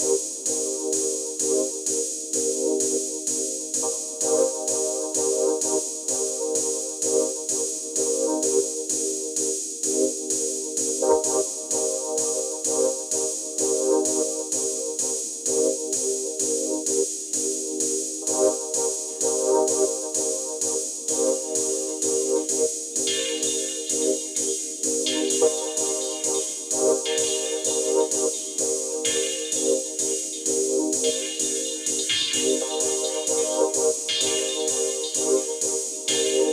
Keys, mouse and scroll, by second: 1.2 alt+scroll up 1, 1.4 space, 1.5-2.0 click, 1.8 space, 2.4 shift+click, 3.3 ctrl+t, 4.4-6.1 drag, 7.0-8.0 drag, 10.4 right click, 11.5 click, 12.8-13.2 alt+scroll down 1, 15.2-16.7 alt+drag, 16.7-27.8 alt+drag, 27.8-31.4 alt+shift+drag, 33.6 ctrl+t, 34.3 click.